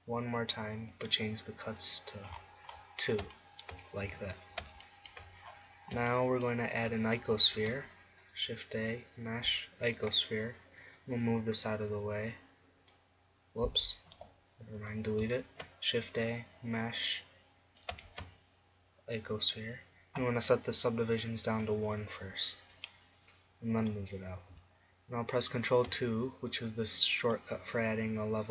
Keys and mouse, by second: 1.0 click, 3.6 middle click, 4.2 Tab, 7.7 shift+a, 14.2 x, 15.6 shift+a, 18.1 shift+a, 21.3-24.8 drag, 25.7 ctrl+2, 27.4-28.5 drag.